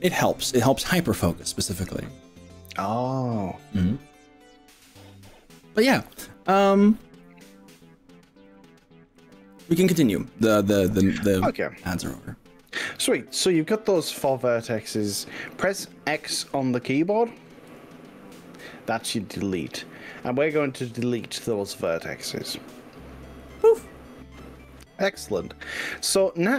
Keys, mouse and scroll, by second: 17.7 x.